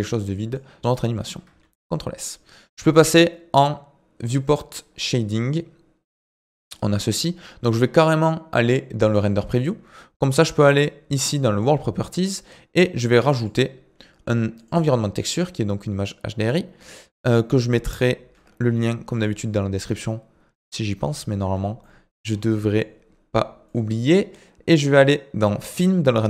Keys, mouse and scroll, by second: 0.2-1.7 middle drag, 1.7 ctrl+s, 4.3 click, 5.0-8.1 middle drag, 9.3 click, 11.6-20.6 drag, 21.9 middle click, 22.3-22.7 scroll up 3, 22.7-23.7 middle drag, 23.7 click, 25.6-26.2 drag.